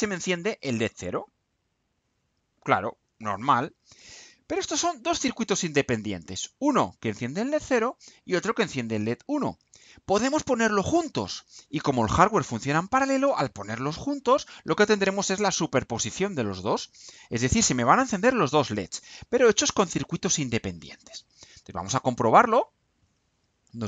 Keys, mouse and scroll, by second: 7.3 click, 9.3 click, 21.6 click.